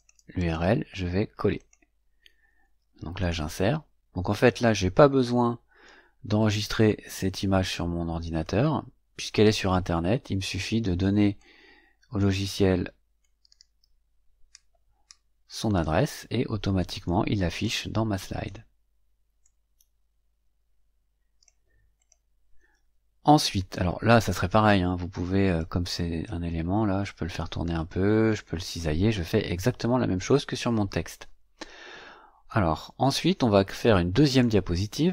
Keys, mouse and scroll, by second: 0.3 right click, 1.5 click, 3.1 click, 4.6 click, 6.9-7.2 scroll down 2, 8.4-9.6 drag, 9.8-11.1 scroll down 4, 11.3-12.3 drag, 13.1-15.9 drag, 16.7-17.7 drag, 17.9-18.4 scroll up 2, 18.4-19.3 scroll down 2, 19.3-21.6 drag, 21.9 click, 23.6-24.3 drag, 25.4 click, 26.2-28.0 drag, 33.7-34.5 drag.